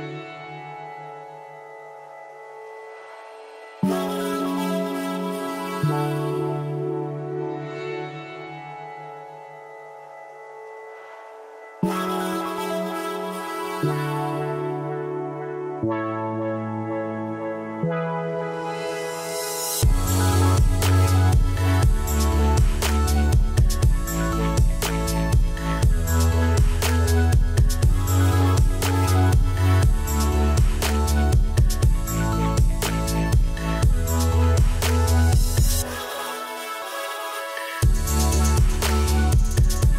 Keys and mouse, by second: 0.4 click, 8.9 Escape, 9.2 ctrl+1, 9.3 click, 16.5 click, 18.1 Delete, 19.0 click, 19.6 ctrl+e, 19.7 click, 20.0 ctrl+1, 20.0 click, 21.1 a, 21.2 click, 21.8 KP_0, 22.0 Return, 22.5 click, 26.2 KP_Decimal, 27.4 click, 28.5 Return, 30.6 Escape, 30.7 click, 33.0 ctrl+shift+x, 33.2 click, 34.4 click, 35.2 click, 35.6 click, 36.0 ctrl+shift+x, 36.5 click, 37.3 click, 38.7 Escape, 39.3 right click, 39.7 click.